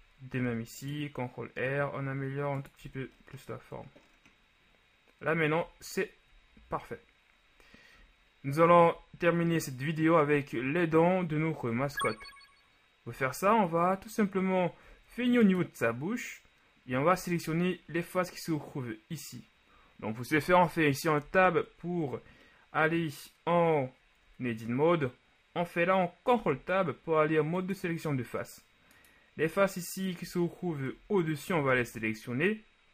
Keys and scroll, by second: 0.5 ctrl+shift+r, 2.9 Tab, 11.8 ctrl+s, 21.4 Tab, 26.4 ctrl+Tab, 31.0 KP_1, 31.8 z.